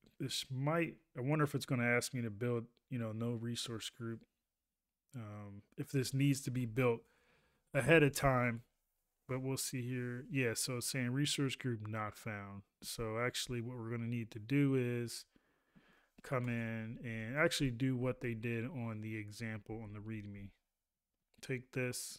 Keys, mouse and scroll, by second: 17.2 ctrl+a.